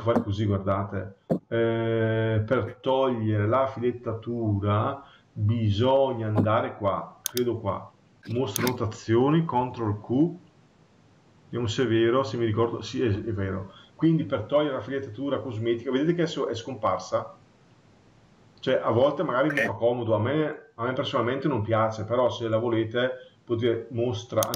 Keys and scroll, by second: 9.5 ctrl+q.